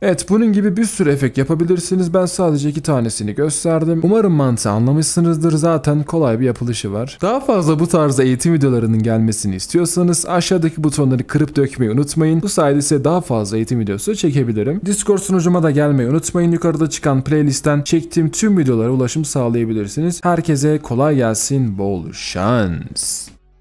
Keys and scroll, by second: 0.2-0.7 alt+scroll down 1.